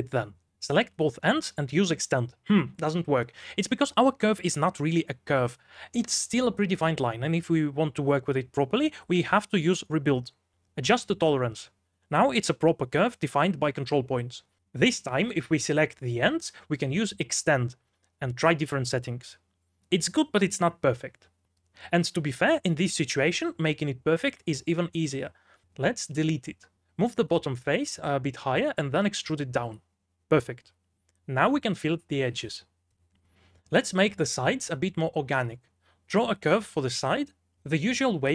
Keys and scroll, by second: 0.0-3.9 typing, 9.7 Escape, 9.7-11.3 typing, 13.2-14.1 typing, 15.5-18.3 typing, 21.1-23.7 typing, 26.6 3, 27.8 Escape, 28.4 e, 29.5-32.6 typing, 33.6-35.1 typing, 36.2 3, 36.6 x, 36.8 space.